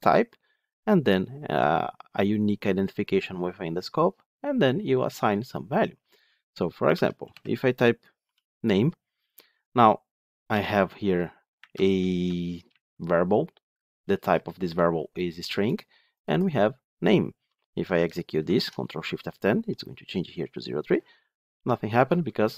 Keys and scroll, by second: 18.3 ctrl+shift+F10.